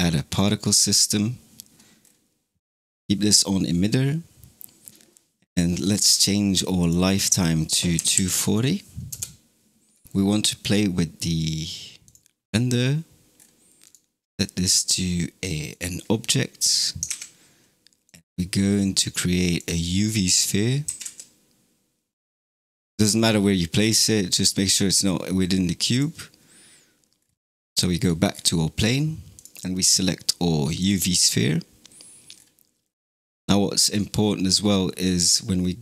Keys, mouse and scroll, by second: 0.2-1.9 drag, 1.9 scroll down 3, 6.6-9.7 drag, 10.0 scroll down 6, 11.9-12.4 drag, 12.4-13.2 scroll down 4, 13.2-13.7 scroll down 3, 13.7-16.9 drag, 16.9 shift+a, 19.9-20.7 middle drag, 20.7 g, 22.9-23.6 middle drag, 23.6 scroll down 2, 25.2 scroll up 1, 25.8 click, 27.0-28.4 scroll down 13, 29.2 click, 31.8-32.6 scroll down 6.